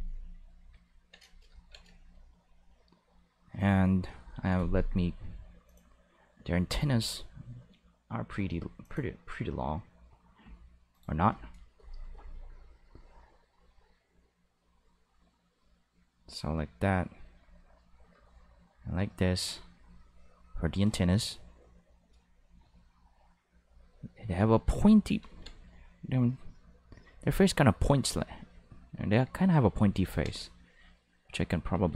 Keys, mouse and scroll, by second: 3.8 click, 5.6 click, 8.8 click, 10.9 click, 14.6 click, 15.6 click, 16.0 click, 16.9 click, 17.1 click, 17.6 click, 18.5-19.5 drag, 23.6 click, 24.3 click, 25.2 ctrl+z, 26.6 click, 27.4 click, 27.8 click, 28.3 click, 28.8 click, 29.8 ctrl+z, 30.0 ctrl+z, 30.5 click, 31.1 click.